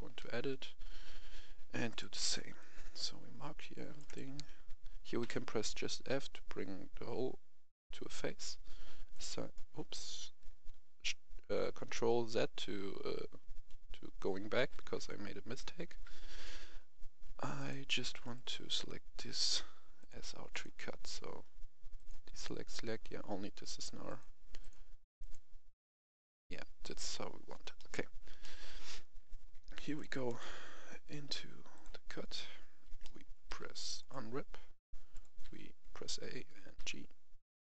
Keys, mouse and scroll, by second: 1.8 click, 2.2 c, 2.5 click, 4.0 right click, 5.2 f, 9.1 click, 14.6 ctrl+z, 15.9 a, 17.5 click, 18.2 right click, 19.9-23.3 drag, 27.7 middle click, 28.7-29.5 scroll up 1, 29.9-31.3 drag, 33.0 middle click, 34.0 click, 36.8 g.